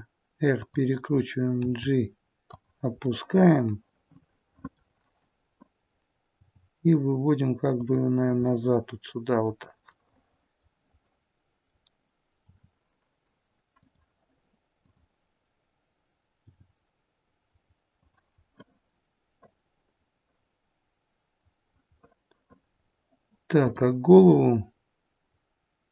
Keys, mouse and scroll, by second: 1.5 g, 2.9 middle click, 5.4 middle click, 6.4 g, 8.3 middle click, 9.8 middle click, 12.4 middle click, 12.4 r, 14.7 click, 16.3 g, 18.3 middle click, 19.5 middle click, 23.5 middle click, 23.5 click.